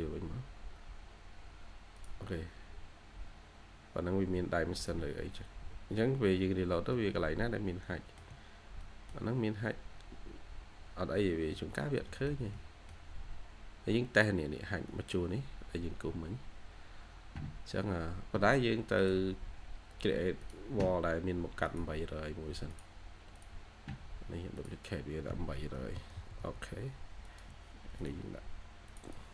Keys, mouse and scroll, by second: 6.0 scroll up 1, 6.3 scroll down 1, 6.8 scroll up 1, 8.1 shift+scroll down 1, 8.7 middle click, 9.3 scroll up 1, 10.8-11.2 scroll down 1, 11.4 middle click, 12.0 middle click, 12.0 scroll up 1, 12.4 middle click, 13.3 scroll up 1, 14.8 middle click, 16.0 scroll down 1, 25.7-26.0 typing, 29.0-29.3 typing, 29.0 double click.